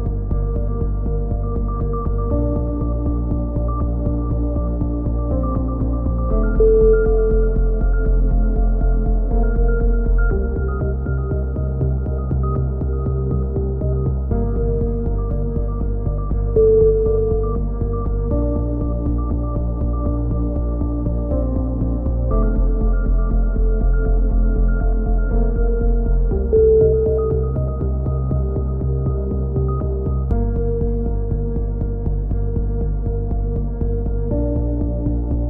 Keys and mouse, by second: 1.3 right click, 3.2 click, 6.3 a, 7.1 middle click, 7.6-9.0 drag, 10.0-11.1 right drag, 11.1 e, 14.3-15.8 middle drag, 15.8 click, 17.7 middle click, 18.8 e, 20.0 click, 20.3-22.1 right drag, 21.8 f, 22.1 a, 22.2 z, 22.8 z, 23.6 right click, 23.7 click, 24.5 click, 25.5-26.6 middle drag, 25.5 a, 26.7 z, 26.9 z, 27.3-29.0 middle drag, 29.5 middle click.